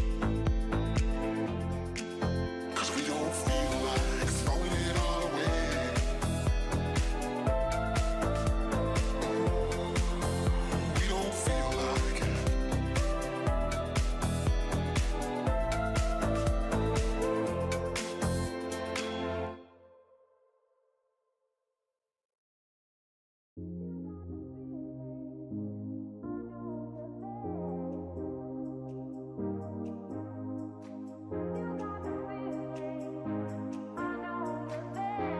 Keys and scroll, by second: 2.0 ctrl+alt+shift+e.